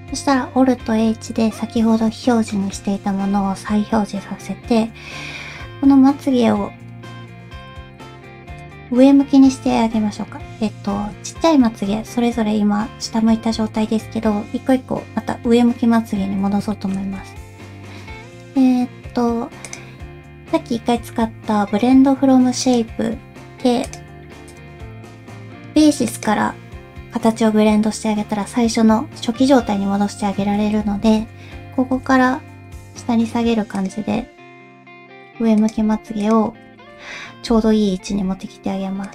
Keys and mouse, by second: 0.7 alt+h, 2.5 shift+middle click, 3.4 alt+a, 5.0 l, 6.9 l, 7.7 ctrl+z, 8.6 click, 9.7 l, 10.9 alt+a, 11.8 l, 12.8 l, 16.7 shift+middle click, 19.6-22.7 drag, 24.6-26.2 drag, 31.0 alt+a, 31.9 l, 32.5 g, 34.1 g, 35.0 s, 35.8 g, 36.7 alt+a, 37.4 l, 38.0 g.